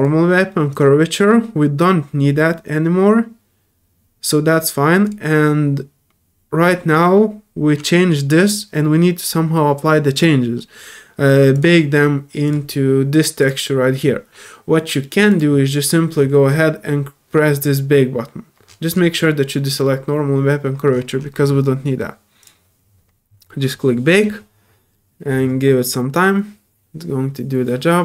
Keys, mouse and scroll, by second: 0.7 click, 5.0 click, 11.5 click, 12.4 click, 13.4 click, 15.3 click, 16.1-16.5 scroll up 4, 22.4 click.